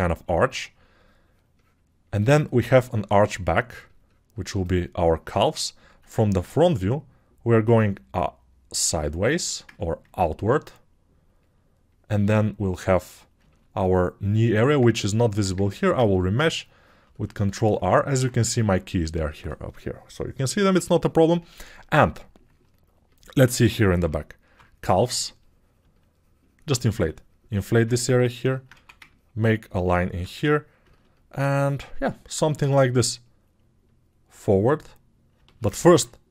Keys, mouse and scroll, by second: 24.6 [.